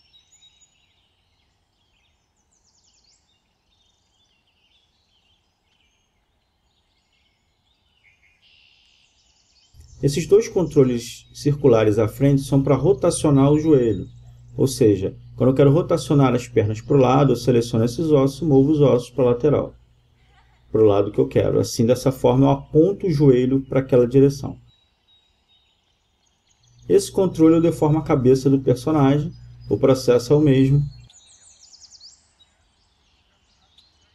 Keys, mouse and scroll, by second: 0.1 r, 1.7-2.0 drag, 2.0-2.8 middle drag, 3.0 middle drag, 3.2 middle click, 3.4 middle click, 3.8 r, 6.6 r, 13.7 click, 13.8 Escape, 14.3 Escape, 16.9 click, 28.6 g, 33.7-34.1 right drag.